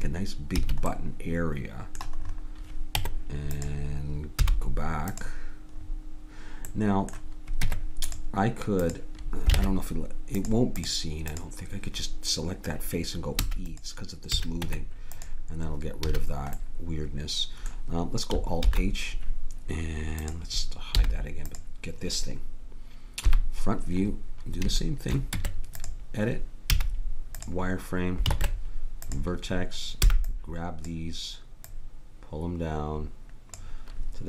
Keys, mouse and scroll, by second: 0.6 a, 2.9 Tab, 4.4 z, 7.7 Tab, 8.8-10.4 drag, 9.6 ctrl+Tab, 13.4 e, 14.3 a, 14.6 Tab, 16.1 a, 18.7 alt+h, 20.2-23.3 drag, 20.9 h, 23.3 KP_1, 24.8 middle click, 25.0 middle click, 25.4 Tab, 26.7 z, 28.3 ctrl+Tab, 30.2 b, 31.7-33.5 drag.